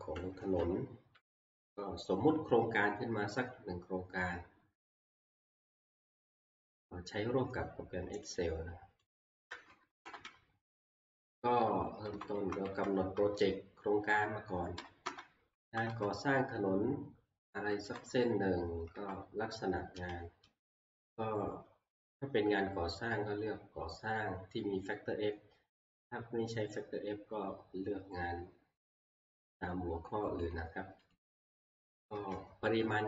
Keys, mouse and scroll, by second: 0.4 Delete, 6.2 click, 8.4-8.8 scroll down 1, 9.1 click, 10.0 Right, 10.0 click, 10.0 scroll down 1, 10.1 Right, 10.3 Right, 11.6 Right, 12.1 Left, 12.3 Left, 12.7 Left, 13.0 Left, 14.8 Right, 15.0 Right, 15.6 Left, 15.9 Left, 17.7 Right, 17.9 Right, 18.9 Left, 20.1 alt+Down, 30.5 click, 31.1 click, 32.7 Left.